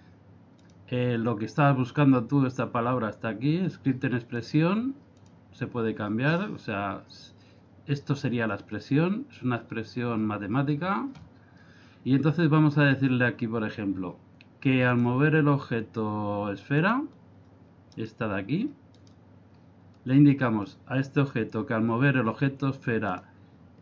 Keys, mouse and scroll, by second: 0.6 click, 5.2 click, 15.0 click, 17.9 right click, 19.0 right click, 23.1 click.